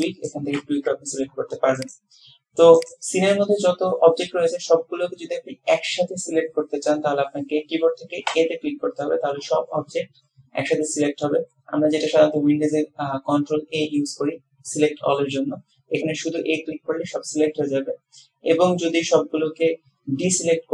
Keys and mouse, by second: 1.9 click, 3.0 click, 8.4 a.